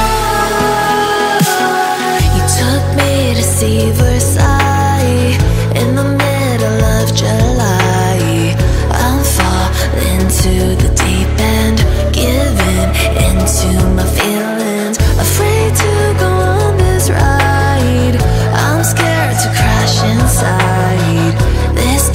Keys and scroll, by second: 3.7 ctrl+2.